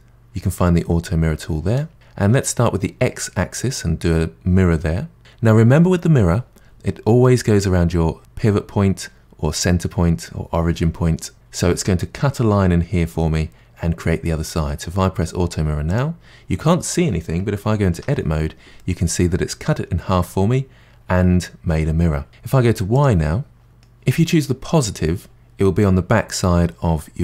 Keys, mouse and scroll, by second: 7.2-7.9 middle drag, 7.9-8.5 scroll up 1, 8.5-10.7 scroll up 1, 15.9 click, 17.9 Tab, 18.8-21.8 middle drag, 22.9 click, 23.7-26.2 middle drag.